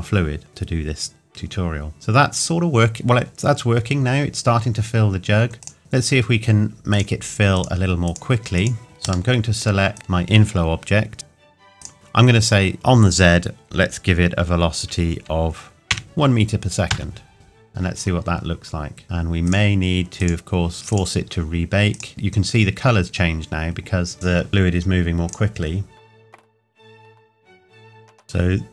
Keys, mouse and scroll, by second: 5.6 click, 8.8 middle click, 9.9 click, 11.8 click, 12.7 click, 15.9 KP_1, 16.9 KP_Enter, 19.0 click, 25.3 click, 26.4 KP_1, 28.0 click.